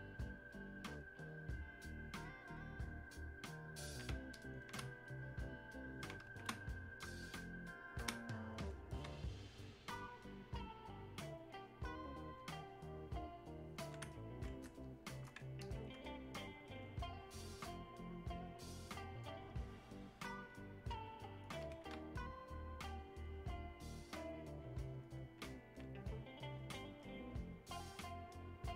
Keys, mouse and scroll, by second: 8.8 click, 9.7-12.4 alt+drag, 12.4-14.9 alt+drag, 14.9 shift+click, 16.1-18.0 drag, 18.0-26.1 alt+drag, 26.1 click, 27.1 click, 28.0-28.7 drag.